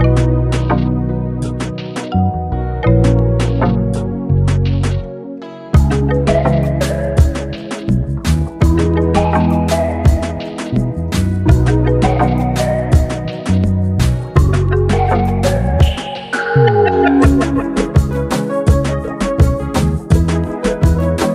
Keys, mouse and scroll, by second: 3.3 click, 6.6-10.5 drag, 12.1 ctrl+z, 13.0 click, 17.6 click, 18.1 space, 18.5 click, 18.6 space, 19.2-21.3 drag.